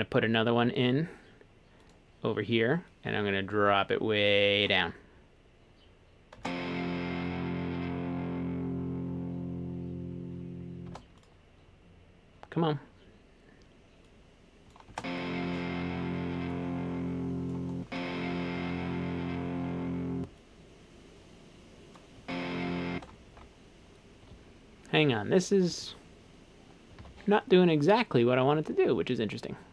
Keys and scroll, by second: 6.4 space, 10.9 space, 14.9 space, 17.6 space, 17.9 space, 20.2 space, 22.2 space, 22.9 space, 23.4 super+z, 27.0 super+z.